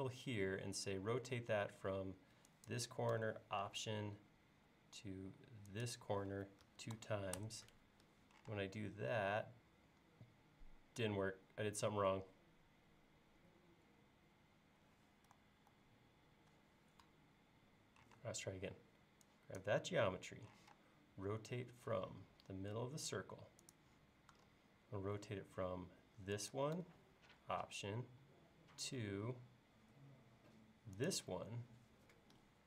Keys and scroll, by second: 6.7-7.0 typing, 8.1-8.5 typing, 15.7 super+z, 18.2 space, 20.6 q.